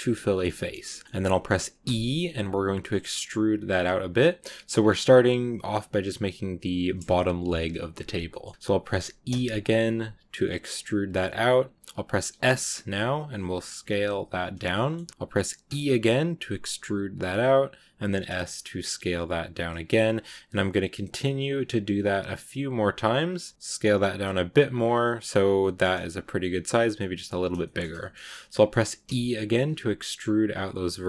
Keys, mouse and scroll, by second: 0.1 shift+middle click, 0.9 scroll up 1, 0.9 middle click, 1.7 e, 4.6-7.7 scroll down 2, 7.9 scroll up 1, 8.1-9.1 middle drag, 9.1 e, 14.6 shift+middle click, 15.1-15.5 scroll up 1, 15.5 e, 23.5 s, 24.7 scroll down 1, 24.7 scroll up 1, 24.8 scroll down 2, 24.9 middle click, 25.5 middle click, 25.8 scroll up 3, 26.0 s, 27.5 shift+middle click, 28.2 scroll down 2, 28.4 middle click, 28.6 scroll up 2, 28.9 e.